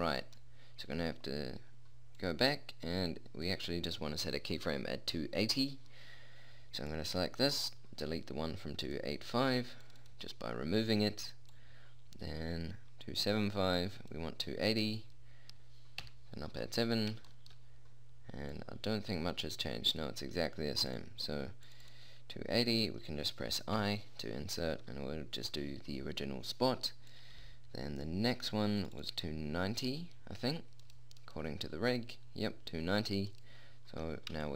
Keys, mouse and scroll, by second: 2.3 middle click, 5.9-7.6 drag, 12.4-13.8 drag, 16.4 KP_7, 17.0-19.6 middle drag, 20.6 middle click, 24.0 middle click, 24.2 i, 27.5-32.0 drag, 31.2 right click, 32.0 middle click.